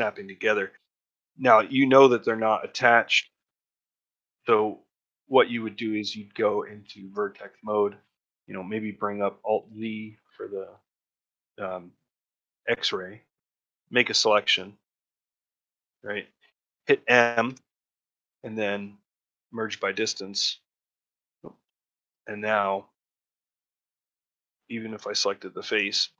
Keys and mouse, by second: 0.8 middle click, 2.4 middle click, 4.5 middle click, 5.3 middle click, 6.9 1, 9.5 alt+z, 20.1 middle click, 20.1 m, 20.3 a, 20.6 middle click, 21.2 a, 22.0 shift+middle click, 22.5 click, 23.0 g, 24.7 3.